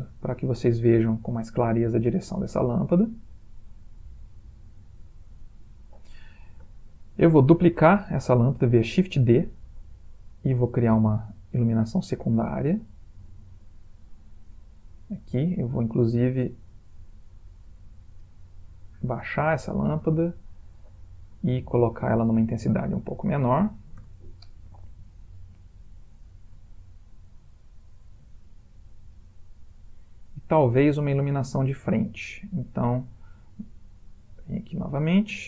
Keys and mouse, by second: 2.5 middle click, 5.4 click, 7.8 shift+d, 9.7 r, 11.4 g, 12.4 r, 13.1 g, 14.2 middle click, 17.1 click, 18.3 g, 19.3 r, 21.6 ctrl+click, 23.7 0, 25.3 middle click, 26.8 shift+middle click, 26.9 shift+middle click, 28.4 middle click, 31.9 middle click, 34.3 click.